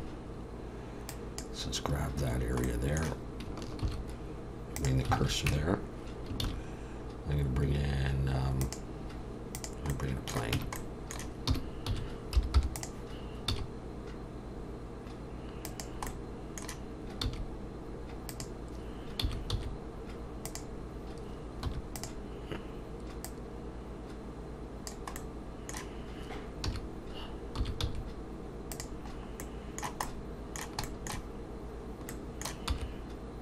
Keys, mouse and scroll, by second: 2.7 middle click, 3.8 shift+s, 5.2 alt+a, 5.5 Tab, 6.4 shift+a, 10.0 middle click, 10.6 Tab, 10.8 middle click, 11.6 r, 13.5 s, 16.1 middle click, 17.2 s, 19.2 s, 21.7 2, 21.9 click, 23.2 click, 25.2 middle click, 26.7 a, 27.6 s, 29.1-30.0 scroll up 2, 29.4 middle click, 30.8 shift+middle click, 31.4 shift+middle click, 32.1 middle click, 32.7 e.